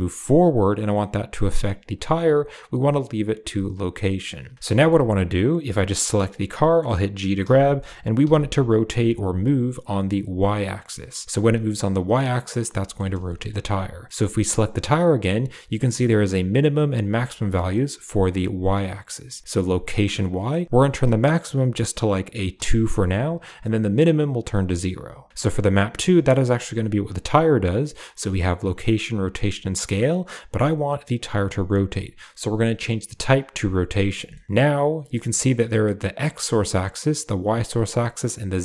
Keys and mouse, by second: 1.7 click, 3.6 click, 4.6 shift+middle click, 5.7 click, 7.3 g, 12.7 shift+middle click, 13.4 click, 21.1-22.8 drag, 28.5 click, 29.0 click, 29.5 click, 33.5 click, 34.2 shift+middle drag.